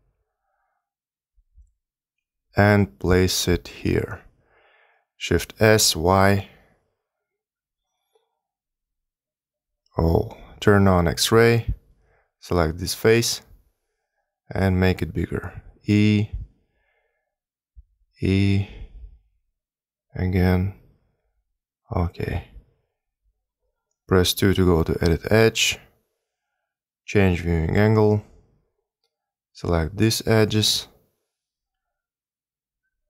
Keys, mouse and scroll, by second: 1.0 g, 1.9 r, 4.1 s, 7.8 click, 9.2 s, 9.7 click, 12.2 click, 13.4 click, 14.5 s, 16.4 e, 17.6 s, 18.8 e, 20.0 r, 21.1 s, 24.7 2, 26.7 middle click, 29.8 click, 30.5 shift+click, 31.1 click, 31.8 shift+click, 32.4 shift+click.